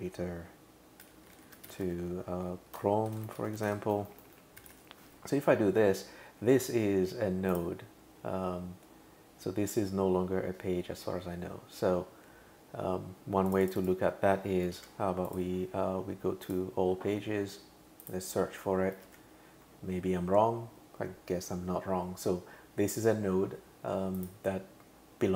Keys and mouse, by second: 0.0-5.2 typing, 7.5 click, 13.5 click, 13.6 click, 13.8 click, 14.8 super+c, 15.3 click, 16.4 click, 18.0 click, 19.0 super+v, 24.2 click.